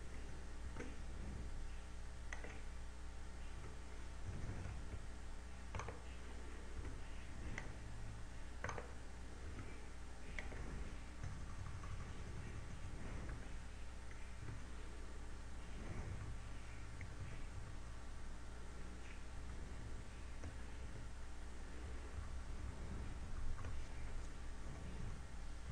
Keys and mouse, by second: 1.7 shift+e, 3.0 click, 5.1 KP_6, 5.5 KP_6, 7.1 right click, 7.9 shift+e, 8.0 click, 9.9 right click, 10.5 shift+e, 11.6 click, 12.4-12.9 KP_4, 13.1 a, 14.7 Tab, 16.5 KP_8, 17.2 KP_8, 17.9 KP_8, 20.5 a, 21.7 Tab, 22.9 KP_2.